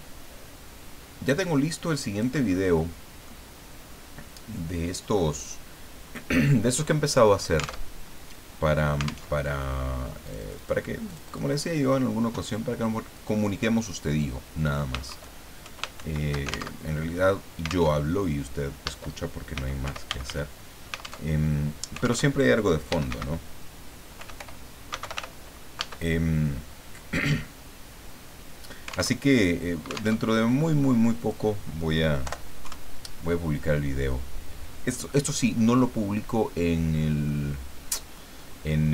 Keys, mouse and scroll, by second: 2.6 ctrl+middle click, 7.9 alt+Tab, 9.3 alt+Tab, 10.2 click, 11.1 click, 13.1 click, 13.9 click, 15.1 shift+Home, 16.0 shift+End, 16.8 alt+shift+Tab, 17.9 alt+Tab, 19.3-20.6 typing, 21.2 alt+Tab, 22.2 alt+Tab, 22.6-25.6 typing, 29.2 alt+Tab, 30.2 alt+Tab, 31.2 click, 32.2 Delete, 32.6 KP_2, 34.1 middle click, 36.3-37.4 middle drag, 38.0-38.9 middle drag.